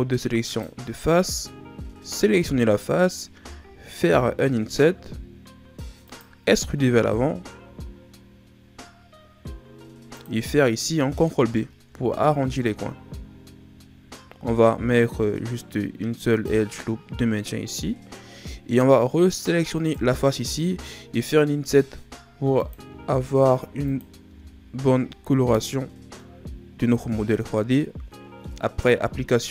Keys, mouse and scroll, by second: 2.5 right click, 4.1 i, 6.7 e, 11.8 ctrl+b, 19.7 right click, 21.6 i, 22.8 i, 24.3 i, 26.1-28.6 middle drag, 28.6-29.5 scroll up 2.